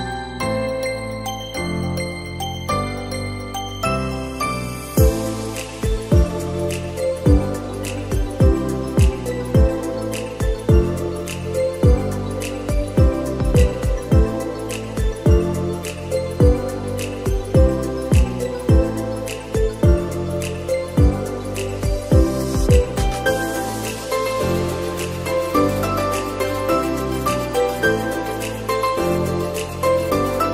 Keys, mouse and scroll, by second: 0.0-1.0 scroll up 3, 1.0-1.6 shift+middle drag, 1.6-2.6 scroll up 1, 2.6-3.2 scroll up 1, 3.2 drag, 4.1-4.9 scroll up 2, 4.9 click, 7.3 click, 8.7-10.5 drag, 23.9 click, 24.8 click, 27.7 click, 29.1-30.4 drag.